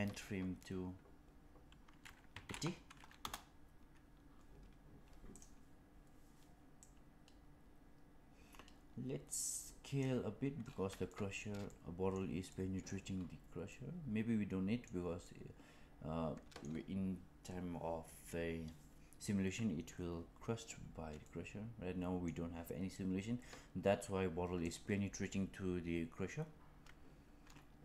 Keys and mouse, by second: 5.2 click, 6.7-9.9 drag, 11.1 shift+middle click, 11.6-12.1 middle drag, 12.4-12.8 middle drag, 13.7-14.8 middle drag, 15.1-16.5 middle drag, 21.2-22.2 middle drag, 24.6 click.